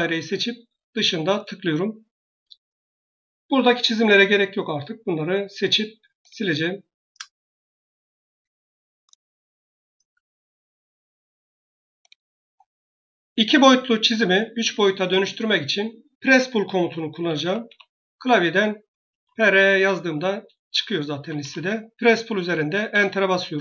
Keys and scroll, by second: 2.3 Escape, 7.0 Delete, 16.9-19.0 typing, 21.0 typing, 22.8 Return.